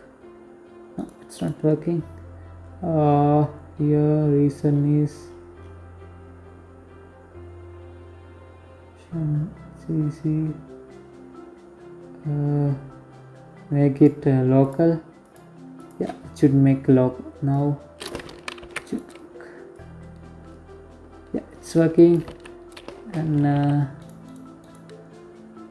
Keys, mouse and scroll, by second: 1.4 scroll down 1, 2.8-7.6 scroll down 16, 9.0-9.7 scroll down 2, 9.7-10.5 scroll down 2, 10.5-12.4 scroll down 1, 12.4 click, 13.7 click, 15.9 click, 17.0 ctrl+z, 17.2 right click, 18.1 click, 20.7 ctrl+z, 21.5 middle click, 21.9 r, 22.7 right click, 23.0 right click, 23.7-24.4 scroll up 1, 24.4-25.7 scroll down 8.